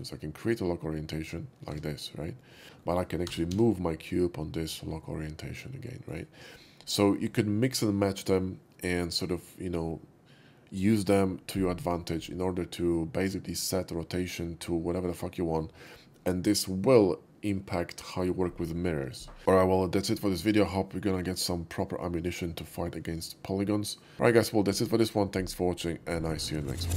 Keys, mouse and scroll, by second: 0.4 click, 1.8 Tab, 2.6 alt+x, 2.8 middle drag, 3.3 g, 3.6 z, 6.1-6.6 right drag, 6.6-6.9 middle drag, 11.9-15.9 middle drag.